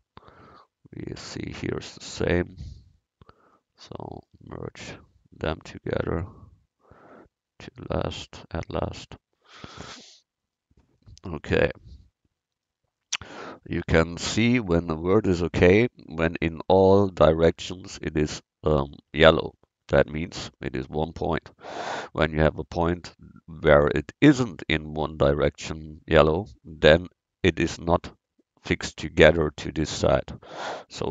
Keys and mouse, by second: 0.0 middle click, 2.7 middle click, 3.4 middle click, 4.5 middle click, 6.3-8.1 drag, 8.1 middle click, 10.0 click, 15.6-31.1 middle drag.